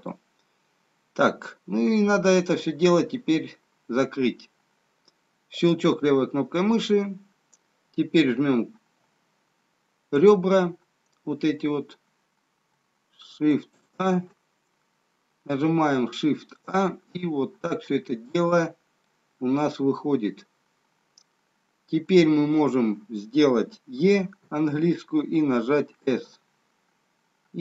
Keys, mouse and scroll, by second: 0.7 middle click, 5.8 click, 11.2 click, 12.2 click, 13.5 alt+shift+click, 17.3 middle click, 17.3-18.2 scroll up 1, 19.8 middle click, 24.7 e.